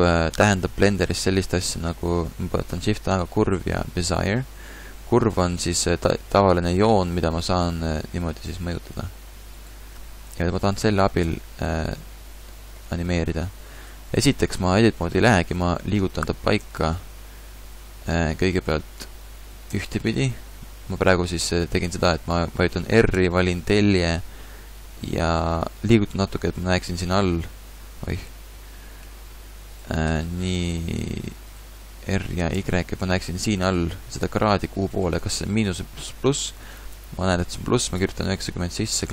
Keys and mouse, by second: 0.9 shift+a, 4.9 Tab, 5.8 g, 6.9 g, 10.3 ctrl+z, 10.6 ctrl+z, 11.3 Tab, 12.4 g, 16.2 r, 21.4 middle click, 23.1 r, 28.3 t, 30.1 t, 30.3 r, 32.1 r.